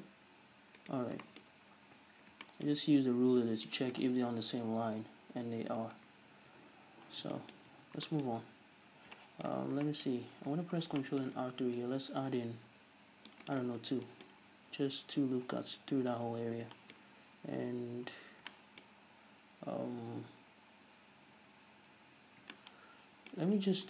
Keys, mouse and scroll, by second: 1.0 right click, 1.1 scroll down 2, 1.3-23.8 shift+middle drag, 1.6-2.5 scroll up 4, 2.0 Tab, 3.0 a, 5.1 shift+n, 6.2 scroll down 2, 6.6 Tab, 7.0 scroll up 1, 7.8 Tab, 8.4-9.0 scroll up 1, 9.0 scroll down 1, 9.7 scroll down 1, 10.3-10.9 scroll up 2, 10.9 scroll down 2, 11.7 ctrl+r, 13.9 scroll down 1, 14.5-14.9 scroll up 1, 14.9 Tab, 15.9 a, 17.1 scroll up 1, 18.2-18.6 scroll down 1.